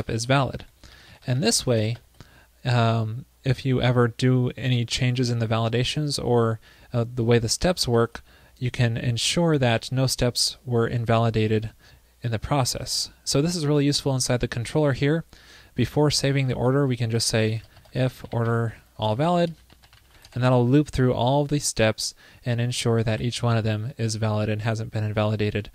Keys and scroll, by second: 0.6 super+Down, 2.0 super+Right, 8.0 super+c, 10.2 super+s, 23.1 super+s.